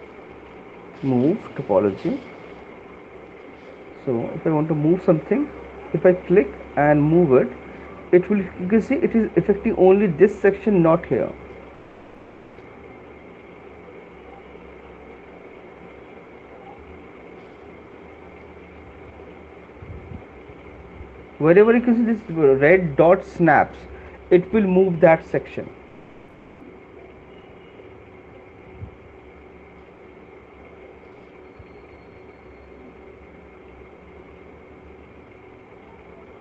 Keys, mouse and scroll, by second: 1.1 click, 1.5 right click, 2.4 ], 2.8 ], 3.2 ], 3.8 ], 6.9 click, 8.3 click, 8.7 click, 9.3 click, 15.7 click, 16.7 click, 17.3 click, 18.9 middle click, 18.9 click, 19.9 middle click, 28.2 click, 29.2 middle click, 31.8 right click, 33.6 right click, 34.2 click, 34.6 click, 35.7 right click, 35.7 middle click.